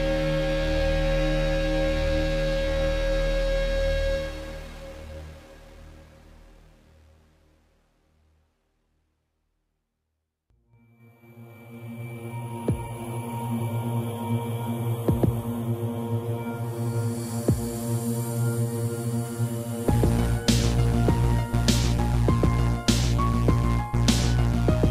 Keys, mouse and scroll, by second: 0.1 middle click, 0.7 middle click, 2.3 click, 2.4 click, 3.6 shift+click, 4.3 1, 5.4-5.9 typing, 6.9 x, 9.2 click, 9.8 ctrl+c, 10.3 Right, 10.8 Left, 11.3 Left, 11.8 ctrl+v, 12.9 scroll down 1, 14.1 click, 14.9 7, 16.2 g, 18.3 click, 19.3 ctrl+c, 19.6 Right, 19.9 ctrl+v, 21.5 middle click, 22.1 shift+middle click, 22.3 middle click, 22.6 middle click, 23.2 shift+middle click.